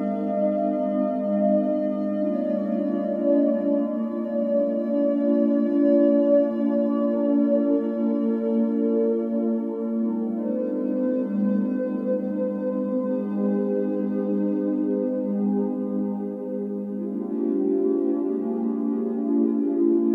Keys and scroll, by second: 2.2-3.5 typing, 9.1 Escape, 14.0 Escape, 15.0 typing, 16.6-17.4 typing, 17.6 Return.